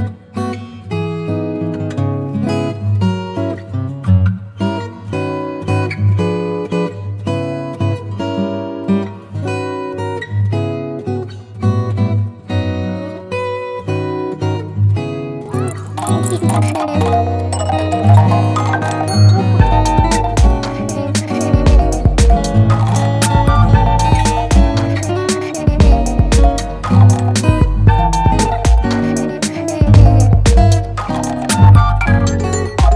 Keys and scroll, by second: 0.7 space, 4.1 space, 5.6 space, 6.2 space, 7.0 ], 8.3 [, 8.8 [, 9.6 ], 10.2 space, 13.0 space, 13.8 [, 17.8 ], 19.2-20.0 typing, 21.4 [, 22.3 ], 22.8 [, 23.5 ], 24.6 v.